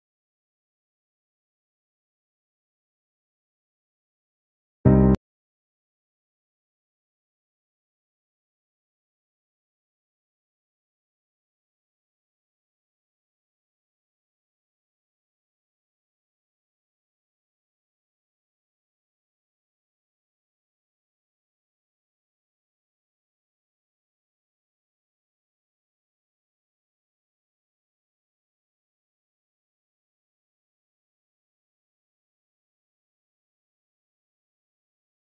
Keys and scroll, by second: 6.6 ctrl+z, 22.5 F3, 24.6 shift+F2, 28.4 shift+F2, 28.7 Escape.